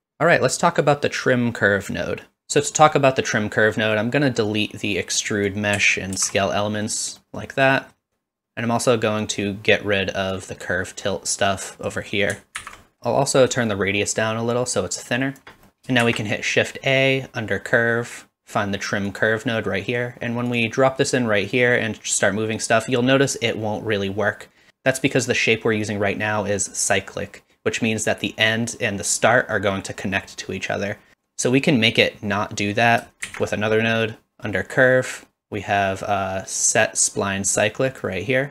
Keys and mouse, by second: 2.4 ctrl+z, 3.0-4.1 middle drag, 4.5-5.5 drag, 6.2 ctrl+x, 6.7 middle click, 7.3 middle click, 7.8 middle click, 10.4-11.7 drag, 12.6 ctrl+x, 13.0 middle click, 13.8-15.4 shift+drag, 16.0 shift+a, 21.7-24.7 drag, 33.2 shift+a.